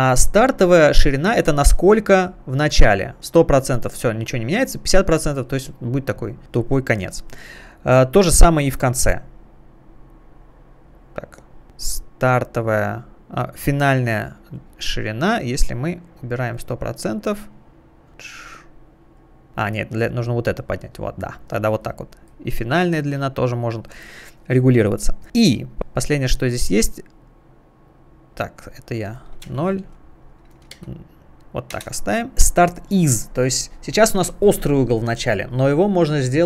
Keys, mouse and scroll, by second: 1.2 click, 5.4 click, 8.8 click, 10.8 click, 12.0 click, 14.5 click, 15.1 click, 19.0 click, 19.8 click, 22.2 click, 25.8 click, 27.5 click, 27.7 click, 29.5 0, 29.8 Tab, 30.8 0, 31.8 Return.